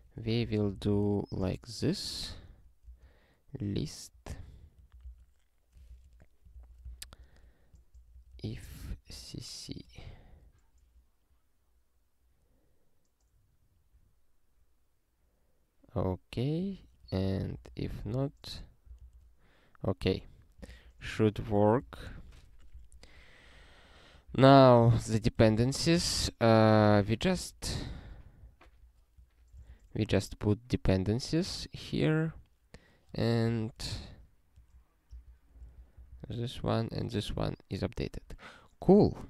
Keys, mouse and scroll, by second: 0.0-1.2 typing, 1.4 alt+shift+s, 1.9 ctrl+g, 2.8 space, 4.3 ctrl+n, 5.0 ctrl+alt+k, 5.9 alt+^, 6.5 ctrl+f, 6.8 Return, 7.1 ctrl+y, 7.9 ctrl+p, 8.1 ctrl+p, 8.3 ctrl+p, 8.5 ctrl+p, 8.7 ctrl+p, 8.8 ctrl+a, 9.7 ctrl+alt+@, 10.0 Tab, 16.8 click, 17.2 ctrl+a, 17.6 ctrl+alt+f, 19.0 ctrl+alt+f, 20.6 ctrl+e, 21.7 ctrl+=, 21.8 Tab, 22.9 ctrl+s, 23.8 click, 24.2 ctrl+b, 25.4 ctrl+d, 25.6 ctrl+d, 26.1 ctrl+s, 26.8 alt+b, 27.3 alt+d, 28.6 alt+BackSpace, 29.3 ctrl+d, 29.7 ctrl+s, 32.1 click, 33.1 BackSpace, 33.5 ctrl+n, 33.9 ctrl+f, 33.9 ctrl+f, 34.6 ctrl+f, 35.1 ctrl+d, 35.7 ctrl+s, 35.9 ctrl+n, 36.1 ctrl+n, 36.3 ctrl+n.